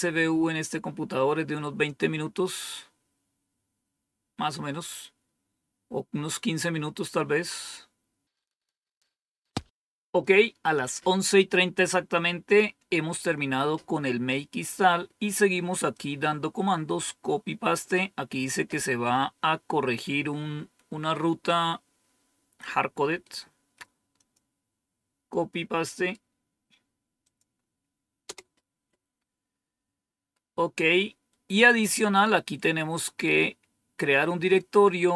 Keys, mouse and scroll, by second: 8.3-8.7 scroll down 2, 8.7 scroll up 2, 9.2-14.6 scroll down 2, 14.6-15.8 scroll down 1, 15.8-17.7 drag, 24.1 click, 27.2 click, 28.3 Return, 30.7 scroll down 1, 31.3-33.8 scroll down 1.